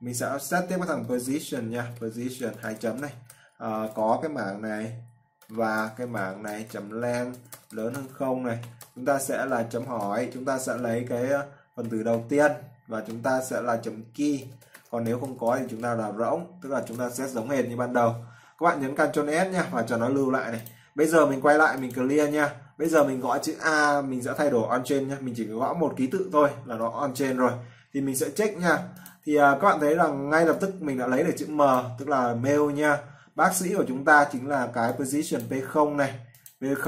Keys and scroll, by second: 3.5 ctrl+v, 6.0 ctrl+v, 6.7 ctrl+v, 7.7 ctrl+v, 17.0 ctrl+s.